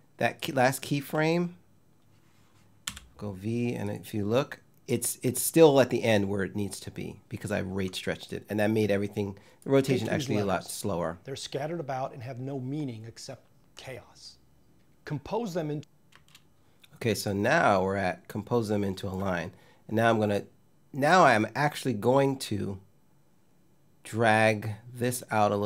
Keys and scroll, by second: 2.5 v, 9.5 space, 15.8 space.